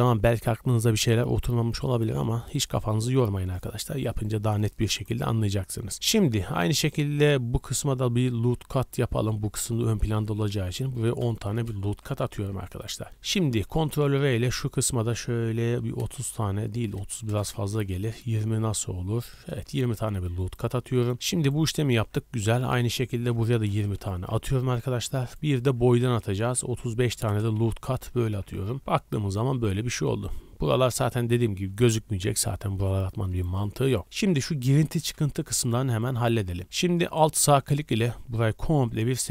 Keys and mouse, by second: 8.6 ctrl+r, 13.7 ctrl+r, 21.9 ctrl+r, 25.8 ctrl+r, 28.3-37.7 drag, 28.3 a, 28.5 a.